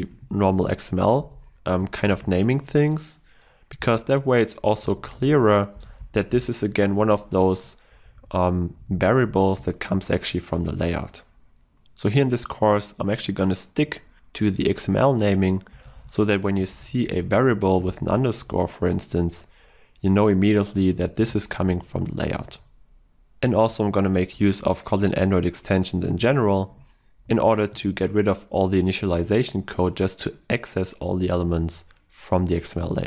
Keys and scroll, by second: 0.4 Escape, 1.4 Escape, 1.5 ctrl+s, 3.9 ctrl+e, 7.4 Escape, 9.6 ctrl+w, 21.2 ctrl+w, 21.9 ctrl+w.